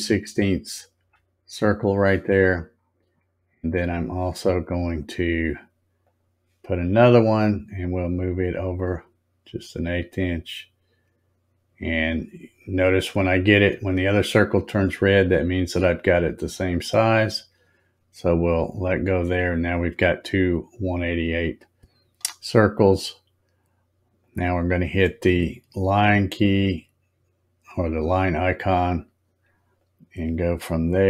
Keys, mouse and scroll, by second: 2.2-3.3 scroll up 7, 3.9 scroll up 1, 6.0 click, 8.8-16.7 drag, 24.2 click, 29.8-31.0 drag.